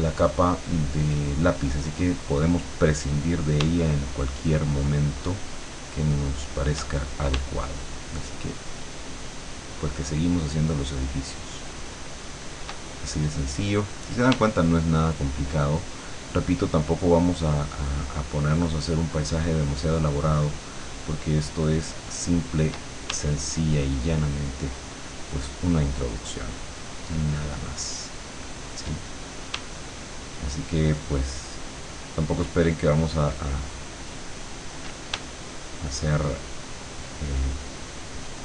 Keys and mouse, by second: 4.2-6.9 shift+drag, 9.5-12.9 shift+drag, 15.3-22.7 shift+drag, 23.5-28.9 shift+drag, 30.9-34.8 shift+drag, 38.2-38.4 shift+drag.